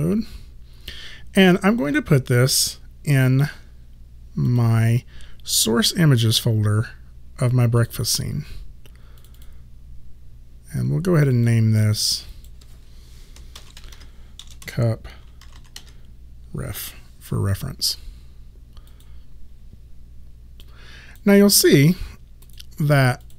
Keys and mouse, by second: 4.5 click, 7.8 click, 13.6 shift+c, 14.5 BackSpace, 14.7 p, 15.5 shift+r, 18.9 click, 21.2 click.